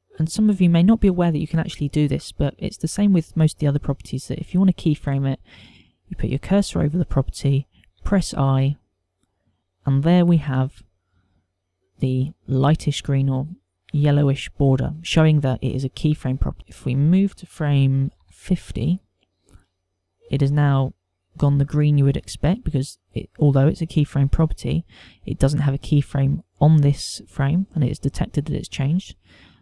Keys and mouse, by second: 9.0 i, 17.4 click.